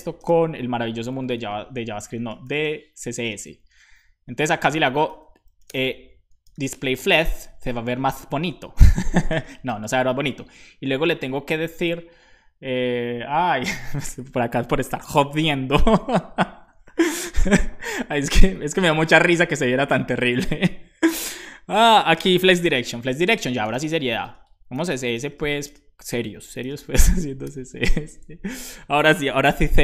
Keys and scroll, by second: 0.1-3.2 typing, 5.0 BackSpace, 6.1-7.2 typing, 7.3 super+s, 7.5 Right, 9.3 space, 22.3-27.0 typing, 27.7 super+s.